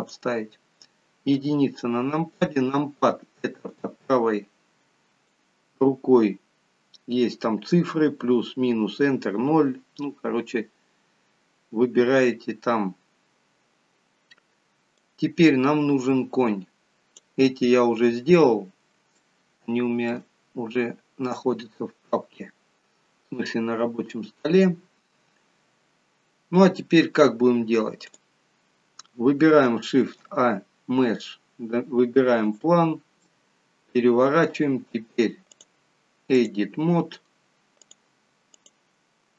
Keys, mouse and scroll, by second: 1.4 KP_1, 3.7 click, 15.0 click, 19.2 shift+middle click, 20.4 scroll up 3, 23.8-24.4 scroll down 1, 28.1 click, 30.1 shift+a, 33.3 middle click, 35.6 click, 37.8 click.